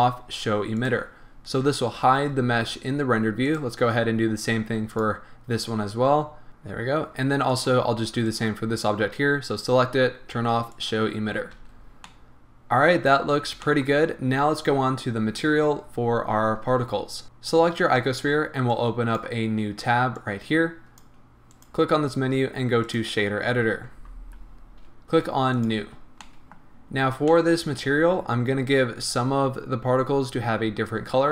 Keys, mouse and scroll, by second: 0.8 click, 3.5 click, 4.9 click, 6.5 scroll down 1, 7.5 click, 8.3 click, 10.7 click, 11.5-12.1 scroll down 2, 11.6 a, 12.1-17.2 middle drag, 13.2 scroll down 1, 13.6 shift+scroll up 1, 17.2 click, 18.7-25.8 drag, 24.0 n, 24.6-25.5 scroll up 2, 26.3-29.5 middle drag, 26.9-27.3 scroll up 2, 27.8-29.1 scroll up 1.